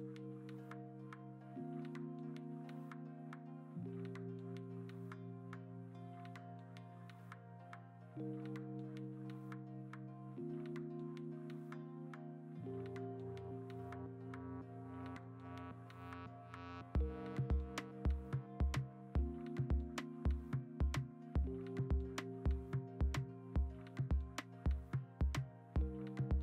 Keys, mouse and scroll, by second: 3.6 ctrl+z, 3.6 e, 4.1 0, 5.6-7.6 typing, 6.1 ctrl+t, 9.5-10.9 typing, 14.4-16.6 typing, 18.1-18.6 scroll, 18.6 Return, 19.5 b, 20.5 ctrl+z, 21.8 2, 22.5 1, 24.3 b, 26.2 4.